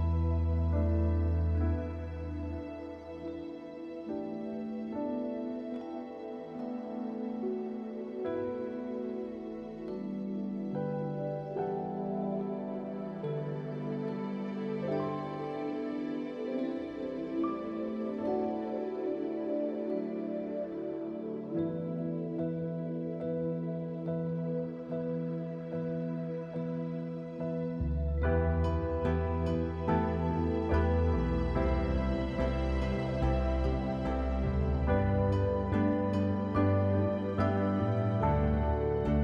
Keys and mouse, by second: 1.0-3.9 right drag, 3.9 middle click, 6.8 click, 9.7 click, 11.2 click, 14.3 click, 22.4 click, 23.1 middle click, 28.9 click, 30.9-39.2 drag.